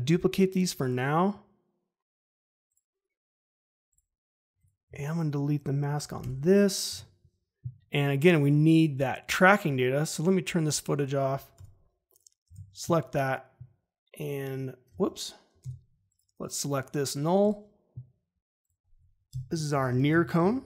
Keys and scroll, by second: 4.8 m, 6.1 Delete, 11.5 e, 15.6 v, 19.2 Return, 19.4-20.6 typing.